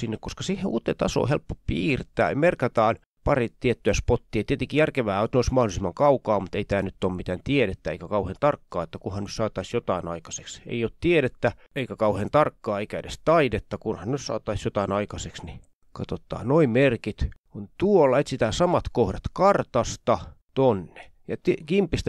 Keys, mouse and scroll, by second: 0.0 click, 1.8 click, 3.7 click, 4.8 click, 5.3 click, 7.6-9.2 ctrl+scroll up 3, 9.2-10.1 ctrl+scroll down 2, 10.1-11.1 ctrl+scroll up 2, 12.4 click, 13.1-14.4 ctrl+scroll down 5, 15.3-16.4 ctrl+scroll up 2, 16.5 ctrl+click, 17.0-17.6 ctrl+scroll down 2, 17.6 ctrl+scroll up 2, 18.4 click, 18.9 ctrl+scroll up 2, 19.5 ctrl+click, 19.7 ctrl+scroll down 2, 19.9 shift+scroll up 3, 20.2 click, 21.5 click.